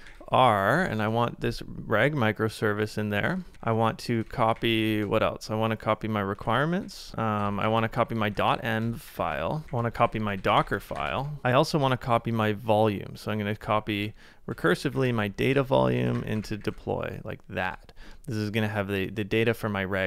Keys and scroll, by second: 0.0-0.8 typing, 3.4 super+c, 3.5-5.1 typing, 6.4 super+c, 6.4-10.1 typing, 6.8 super+v, 11.4-15.9 typing, 17.6 Return.